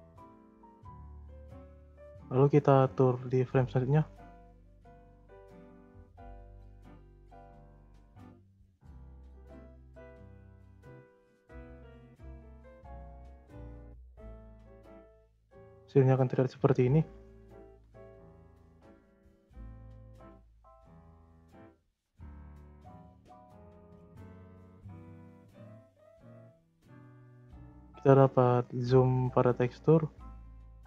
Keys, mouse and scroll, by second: 1.4-4.4 drag, 5.9 click, 6.7 click, 7.5-8.8 drag, 9.5 click, 10.3-10.6 drag, 10.6 space, 11.6 space, 12.0-12.8 middle drag, 12.8-13.2 scroll up 2, 13.2-14.9 middle drag, 14.9 click, 15.8 scroll down 2, 16.1 middle click, 17.1-17.8 drag, 17.8 z, 18.9 click, 19.4 middle click, 20.3 z, 20.7 scroll down 2, 20.9 middle click, 21.4 z, 23.3-24.5 drag, 25.0 space, 26.8 space, 27.7-30.7 drag.